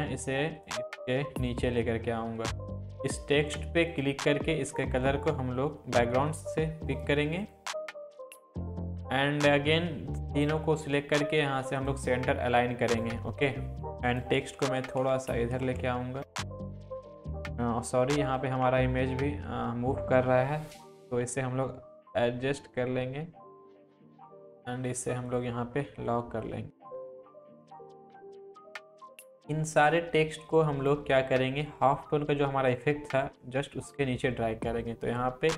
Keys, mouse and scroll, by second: 6.9-10.7 drag, 12.9 click, 14.4 Left, 15.1 Down, 15.6 Left, 16.3 Down, 16.3-16.7 click, 16.7 Down, 17.1 click, 18.6 Up, 21.1 ctrl+t, 22.1-23.5 alt+drag, 24.1-24.5 click, 27.1 click, 27.3 Up, 27.5 click, 27.7 Up, 28.1 click, 28.4-28.9 scroll up 1, 28.9 scroll down 1, 29.2-31.2 drag, 31.9-32.3 scroll down 1, 32.7-34.0 drag.